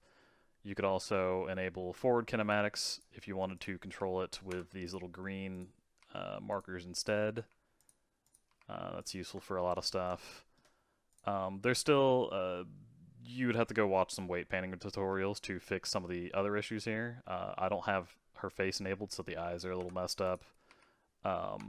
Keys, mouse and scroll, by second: 2.5-3.6 drag, 3.9 r, 4.8 click, 5.5 click, 6.0 r, 6.9 click, 7.3 r, 8.2 click, 8.5 r, 9.8-11.1 shift+middle drag, 11.1 click, 11.6-15.1 middle drag, 15.1 r, 20.2 click, 20.7 r.